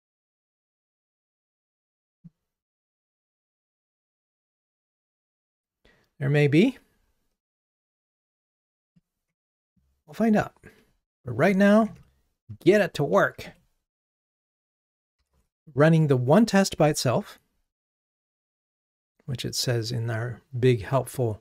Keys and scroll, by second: 1.6 super+c, 2.9 super+v, 13.5 Escape, 15.4 ctrl+r.